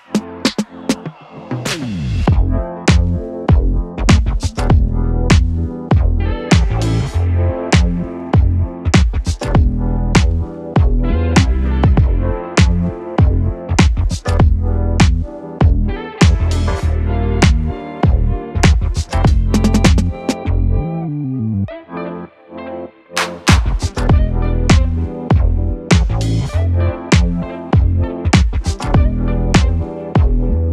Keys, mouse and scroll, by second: 7.8-13.0 drag, 13.8-18.6 drag, 20.1 u, 20.8-22.5 drag, 22.5 F9, 23.4-25.1 drag, 25.2 space.